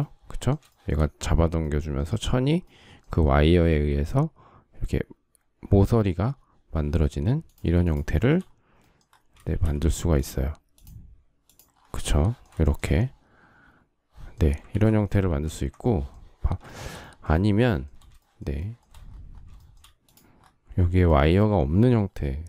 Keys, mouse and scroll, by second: 0.4 shift+middle click, 7.5 shift+click, 7.6 shift+double click, 7.8 shift+middle click, 9.1 shift+x, 12.3 shift+middle click, 14.4 ctrl+z, 14.9 ctrl+z, 16.5 shift+middle click, 17.3 shift+middle click, 18.0 shift+middle click, 18.2 shift+middle click, 19.2 shift+middle click, 19.4 shift+middle click, 22.2 Delete.